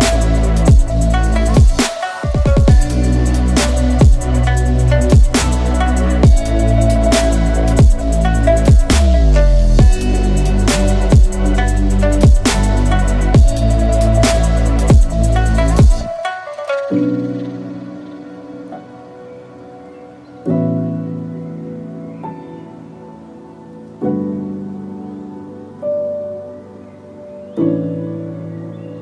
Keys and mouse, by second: 0.4 click, 0.6 alt+click, 1.3 click, 1.5 alt+click, 1.9 ctrl+e, 2.7 a, 3.2 a, 3.5 u, 3.9 a, 4.2 shift+middle click, 5.7-7.4 middle drag, 7.6 middle click, 8.4 click, 9.4 ctrl+click, 10.3 middle click, 11.3 shift+click, 12.2 ctrl+click, 12.7 middle click, 13.6 shift+click, 14.9 ctrl+e, 18.4 a, 18.8 a, 19.1 u, 19.7 a, 20.3 shift+middle click, 21.8 alt+h, 22.2 a, 23.4 a, 24.7 u, 25.8 shift+middle click, 26.3 Tab, 27.0 KP_Divide, 28.4 h, 28.7 ctrl+s.